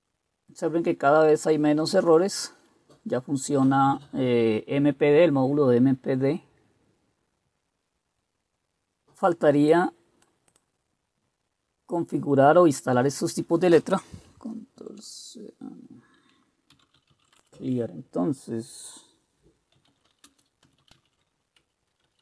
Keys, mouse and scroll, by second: 14.9 ctrl+c, 16.6-17.8 typing, 19.7-22.2 typing.